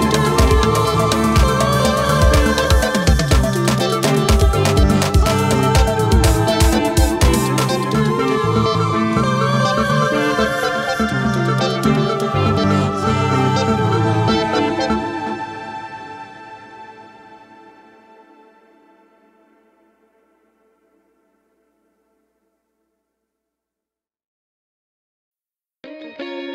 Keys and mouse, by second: 0.3 ctrl+=, 1.1 space, 14.1 [, 15.1 [, 15.8 ], 16.7 ], 17.5 double click, 19.5 [, 19.7 [, 20.0 [, 23.7 x, 25.8 space.